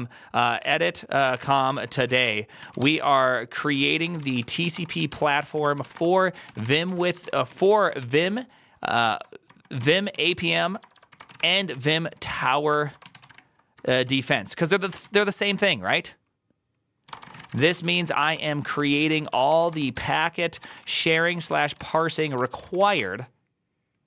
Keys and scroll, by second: 0.6-15.4 typing, 16.7-23.3 typing.